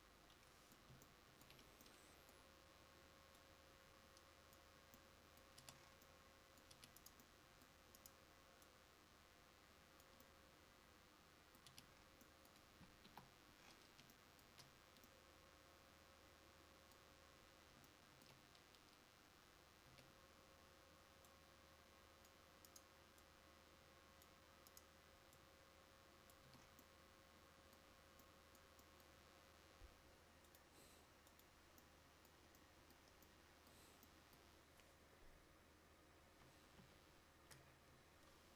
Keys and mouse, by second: 1.3-5.6 right drag, 5.6 Tab, 6.8 Tab, 10.7 middle click, 11.8 Tab, 13.1 KP_5, 20.0 Tab, 22.3-23.5 drag, 26.6 Tab, 31.9-32.3 drag, 32.7-33.4 middle drag, 33.5 middle click, 36.3 KP_1, 36.9 KP_5.